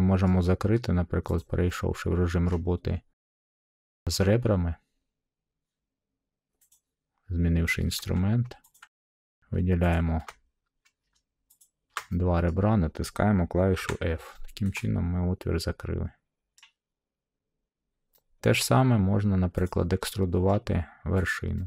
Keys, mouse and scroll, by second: 0.2 middle click, 1.3 click, 2.4 middle click, 6.6 click, 8.7 click, 9.9 click, 11.6 shift+click, 12.4 middle click, 13.7 f, 16.5 middle click, 18.8 middle click, 19.6 click, 20.4 middle click, 20.5 scroll, 21.2 click.